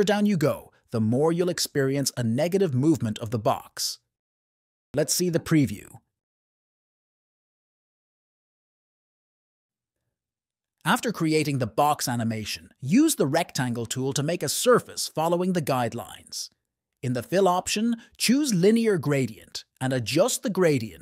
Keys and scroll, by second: 6.4 F1, 6.6 `, 7.5 space, 9.6 space.